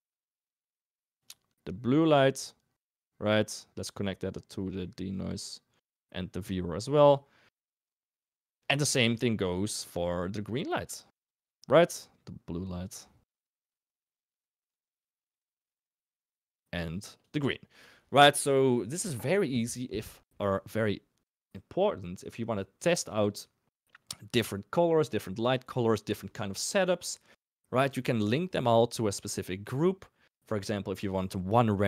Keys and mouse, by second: 0.3 ctrl+shift+click, 0.7 ctrl+shift+click, 0.9 ctrl+shift+click, 3.2 click, 4.6 middle click, 5.2 click, 6.4-7.1 drag, 7.9 middle click, 12.0-12.8 drag, 16.4 click.